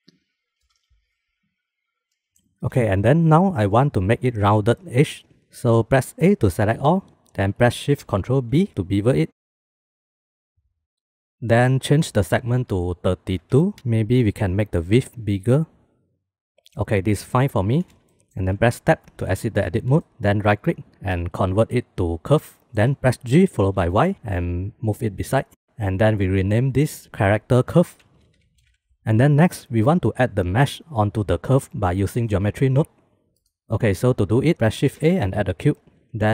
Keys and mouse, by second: 0.3 g, 0.4 e, 2.3 click, 2.8 shift+drag, 6.1 a, 9.8-10.4 ctrl+shift+drag, 12.7-13.7 drag, 14.6 click, 15.0 click, 15.5 click, 15.8 click, 17.5 middle click, 18.7 Tab, 19.5 shift+click, 20.5-22.6 drag, 23.2 g, 26.4-34.2 drag, 29.0 ctrl+s, 34.6 shift+a.